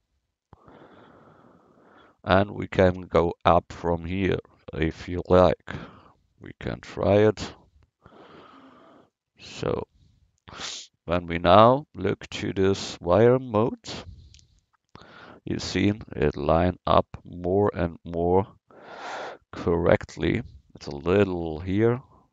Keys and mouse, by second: 6.0 ctrl+r, 9.9 Tab, 13.4-20.2 drag, 22.0 Tab.